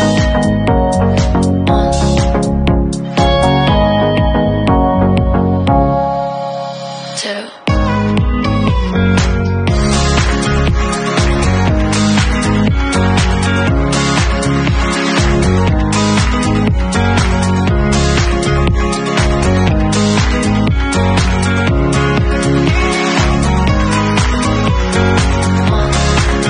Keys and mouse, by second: 2.1 middle click, 2.3 click, 2.4 middle click, 2.6 click, 2.7 middle click, 2.9 click, 2.9-4.0 middle drag, 4.0-13.5 shift+drag, 9.9 BackSpace, 13.5-15.1 middle drag, 15.1 click, 15.1-20.7 middle drag, 20.7 click, 21.6-22.3 middle drag, 22.3 click, 22.4-23.6 middle drag, 23.6 click, 23.6-25.4 middle drag, 25.4-26.4 drag.